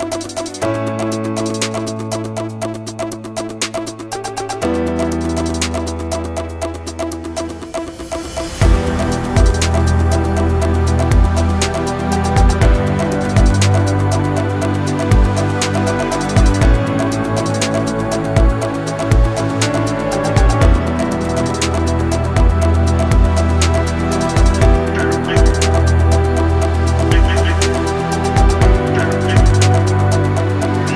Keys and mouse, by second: 0.1 shift+right click, 0.6 shift+middle click, 1.4 shift+click, 2.3 shift+click, 2.6 ctrl+e, 4.7 a, 5.4 right click, 6.2 shift+right click, 6.6 middle click, 7.8 shift+right click, 8.1 middle click, 9.8 shift+right click, 10.3 ctrl+e, 10.9 a, 11.3 a, 11.6 u, 12.0 a, 12.6 shift+middle click, 13.5 3, 14.4 b, 15.5 ctrl+l, 15.9 h, 16.7 2, 17.1 middle click, 17.7 shift+middle click, 18.7-22.9 middle drag, 23.8 shift+middle click, 24.5 click, 25.0 ctrl+click, 25.2 ctrl+e, 25.8 a, 26.3 middle click, 26.7 shift+middle click, 27.4 right click, 27.9 ctrl+right click, 28.1 ctrl+e, 28.6 a, 29.0 middle click, 29.6 right click, 30.3 right click.